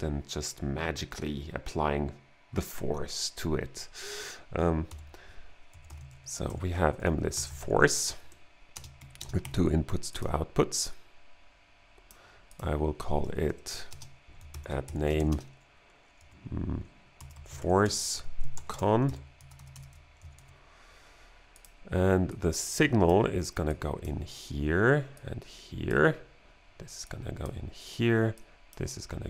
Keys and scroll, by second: 4.9-9.4 typing, 8.3 Right, 13.5 Right, 13.9-20.9 typing, 14.5 alt+g.